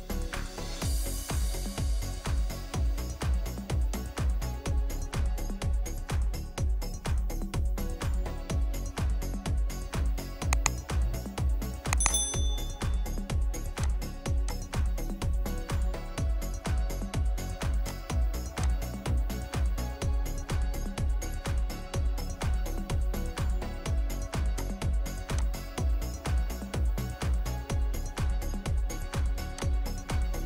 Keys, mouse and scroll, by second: 0.9-2.0 scroll down 1, 7.3 Escape, 10.1 scroll up 1, 10.4-13.8 scroll down 1, 15.6-15.9 typing, 16.4 Return, 19.9-20.2 typing, 20.6 Return, 21.6-22.4 scroll up 1, 22.4 scroll down 1, 23.5 scroll up 1, 23.7-24.6 scroll down 1, 26.7 1, 27.0 Return, 28.0-29.6 scroll up 1.